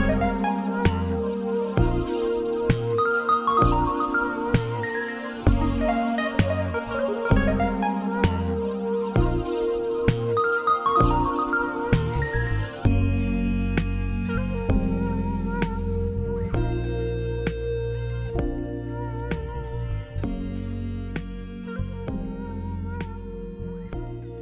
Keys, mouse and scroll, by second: 0.4 click, 4.2-6.3 middle drag, 6.3 e, 8.1 middle click, 8.6 s, 9.7 middle click, 10.3 s, 11.0 middle click, 12.3 e, 15.1 middle click, 15.9 click, 16.8-22.3 middle drag, 22.1 e, 22.3 click.